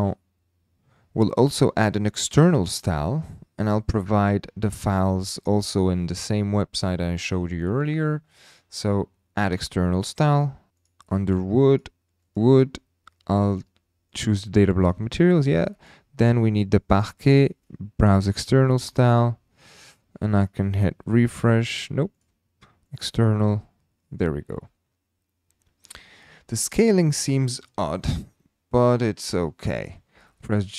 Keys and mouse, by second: 10.0 click, 20.4 click, 22.2 drag, 22.4-23.0 middle drag, 30.1 g, 30.2 z.